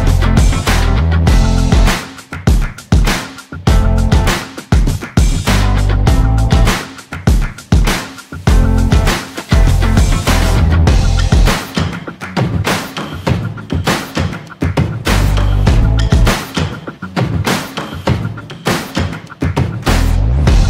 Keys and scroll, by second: 20.5 ctrl+z.